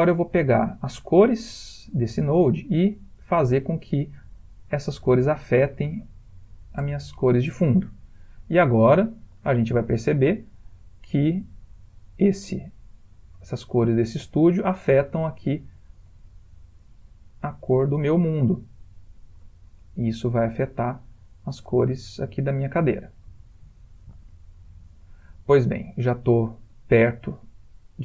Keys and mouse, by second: 0.5 click, 1.5 click, 4.3 click, 6.8 ctrl+middle click, 7.6 ctrl+middle click, 8.0 middle click, 10.1 ctrl+space, 10.8 middle click, 18.3 middle click, 18.8-20.3 ctrl+middle click, 20.1 middle click, 20.9-21.3 shift+middle click, 21.0 shift+middle click, 21.1 shift+middle click, 22.1 ctrl+middle click, 22.2 ctrl+middle click, 22.3 ctrl+middle click, 23.0 middle click.